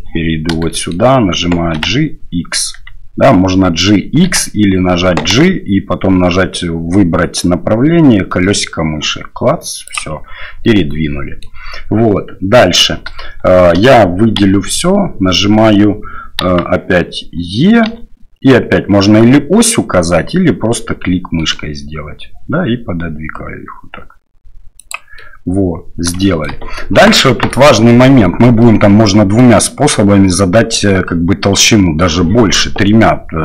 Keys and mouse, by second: 0.7 shift+drag, 1.7 g, 5.2 g, 10.6 click, 13.1 shift+click, 14.4 a, 16.4 KP_1, 17.9 e, 25.1 middle click, 26.2 shift+middle click, 27.5 middle click, 28.6 middle click, 30.9 middle click.